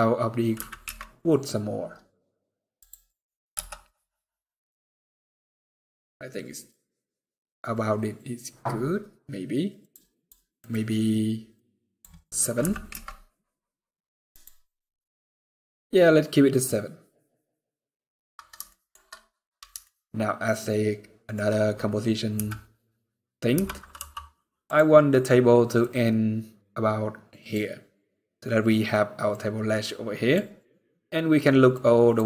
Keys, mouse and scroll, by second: 2.5 click, 3.2 KP_0, 4.0 scroll up 4, 4.4 scroll down 1, 5.4-5.8 scroll down 3, 6.2-6.5 scroll down 3, 6.5 scroll up 2, 8.5-9.2 scroll down 1, 14.0 click, 17.1 scroll down 1, 17.8-18.2 scroll down 3, 18.3 shift+middle click, 18.7-19.0 shift+scroll up 2, 19.4 scroll up 1, 19.5 shift+middle click, 22.1 n, 23.7 t, 24.3 click, 29.0 click.